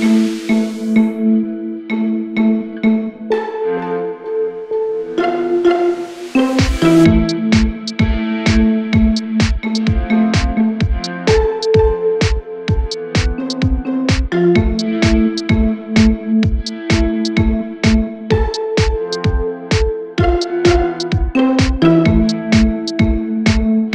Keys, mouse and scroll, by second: 1.0 r, 2.2 Tab, 2.4-2.9 scroll down 2, 2.9 z, 3.1 scroll down 1, 3.2-4.3 middle drag, 4.3 KP_1, 4.6-5.6 scroll up 5, 5.6 Tab, 6.1 z, 6.9 z, 7.3 shift+middle click, 7.9 g, 8.9 z, 9.8 g, 10.4 r, 12.0 shift+middle click, 12.3 r, 14.3 e, 15.0 g, 16.0 r, 17.0 g, 19.5 r, 20.6 g, 23.6 e.